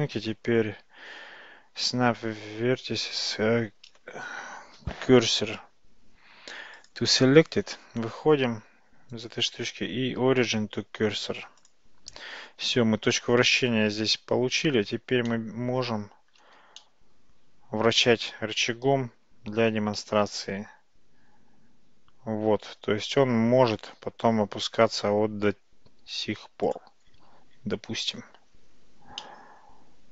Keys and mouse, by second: 0.0-7.0 right drag, 8.6 Tab, 9.2-11.8 right drag, 12.2 Tab, 14.8 Tab, 15.4-15.9 middle drag, 16.8-18.1 middle drag, 20.0 r, 29.2-30.1 middle drag.